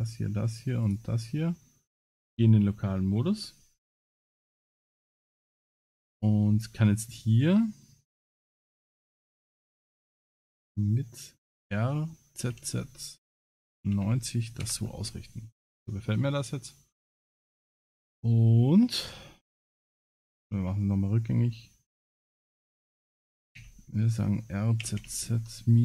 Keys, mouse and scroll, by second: 0.0 shift+click, 4.2 KP_0, 4.9 scroll up 3, 6.0 click, 11.5 r, 22.0 ctrl+z, 22.0 scroll down 1, 22.3-22.6 scroll up 1, 23.6 r.